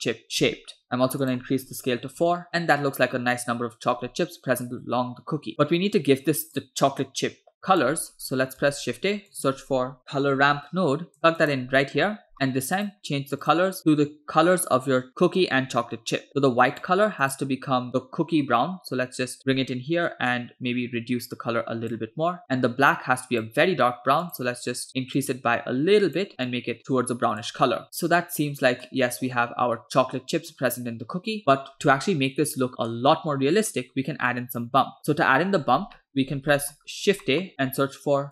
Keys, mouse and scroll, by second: 1.3-2.3 drag, 2.5-4.0 middle drag, 5.5 middle click, 5.5-6.6 scroll down 3, 6.6 scroll down 1, 6.6-7.9 drag, 8.2-8.6 scroll up 2, 8.7 shift+a, 12.0-12.4 scroll up 3, 12.3 middle click, 12.8 click, 16.7 click, 17.3 click, 23.0 click, 24.3 click, 28.7 scroll down 2, 29.0-30.6 middle drag, 30.6-30.9 scroll up 2, 31.4 scroll down 1, 31.7-32.2 scroll up 4, 32.7-33.2 scroll down 2, 33.7-34.3 scroll down 3, 34.3 click, 35.0-35.4 scroll down 1, 35.7 scroll down 1, 36.0 middle click, 36.3-37.2 scroll up 3, 36.5 middle click, 37.3 middle click, 37.5-38.3 scroll up 2, 37.8 shift+a.